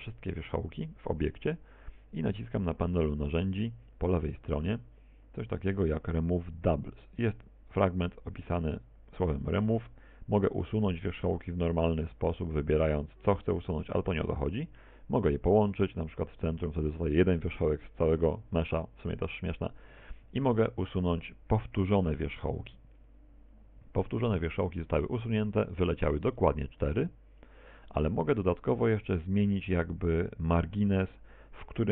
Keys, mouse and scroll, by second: 17.6 click, 21.6 click, 24.4 ctrl+z, 29.4 click.